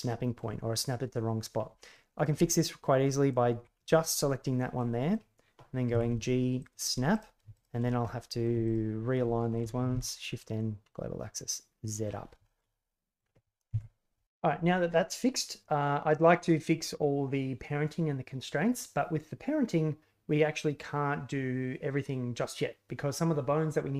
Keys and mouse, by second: 1.9 middle click, 2.5-3.5 ctrl+drag, 3.7-4.1 middle drag, 4.7-5.1 middle drag, 5.9 g, 7.1 right click, 7.5 shift+right click, 8.0-8.4 middle drag, 8.6 shift+right click, 9.9 shift+n, 10.8-11.4 middle drag, 11.4 drag, 11.6 middle click, 11.7 click, 11.8 middle click, 12.4 shift+click, 12.7 click, 13.1 middle click, 13.7 KP_1.